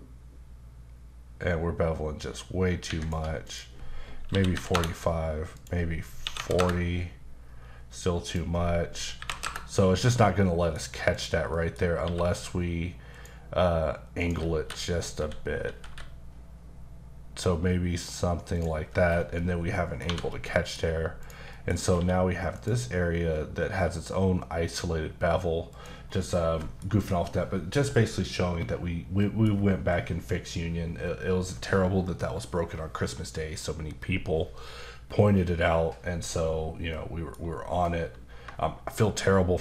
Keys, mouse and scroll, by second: 2.8 shift+Escape, 3.5 click, 4.3 KP_4, 4.7 KP_Enter, 5.5 click, 6.2 KP_4, 8.2 click, 9.2 KP_6, 9.4 KP_Enter, 10.0 Escape, 11.1 click, 11.5 middle click, 12.0 q, 13.1 click, 14.2 click, 14.7-15.9 typing, 18.5 click, 18.9-19.3 scroll down 2, 20.0 1, 20.3 middle click, 21.2 click, 21.5 middle click, 21.7 scroll up 2, 21.9 q, 22.5 click, 25.7 click, 26.0 scroll down 2, 26.3 middle click, 29.2 middle click, 36.9 middle click.